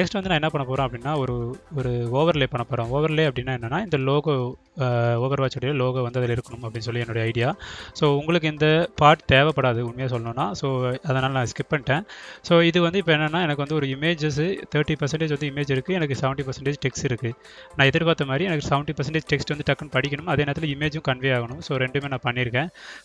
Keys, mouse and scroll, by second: 0.3 right click, 1.5 click, 2.7 click, 3.5 click, 6.2 click, 6.5-7.7 drag, 7.9 click, 9.1 right click, 9.5-10.5 drag, 15.6 click, 18.5 click, 19.2 ctrl+click, 20.3 click, 20.6-23.0 drag.